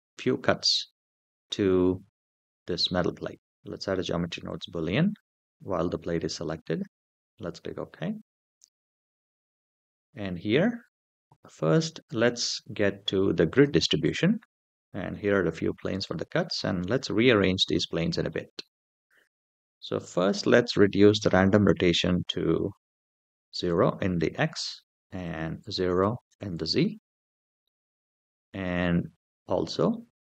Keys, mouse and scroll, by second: 4.2-6.3 drag, 8.5-9.3 scroll down 3, 9.3-10.0 scroll down 4, 13.3 click, 14.9-16.3 middle drag, 16.8-17.6 scroll up 3, 17.8 shift+middle drag, 18.4 middle click, 20.9-23.4 drag, 25.0-26.1 drag, 29.7-30.3 middle drag.